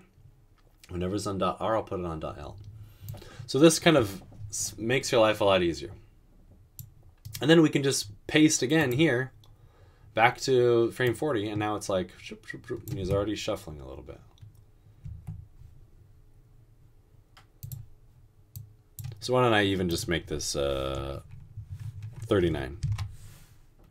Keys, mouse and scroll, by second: 13.1 typing, 15.1 typing, 22.9 typing.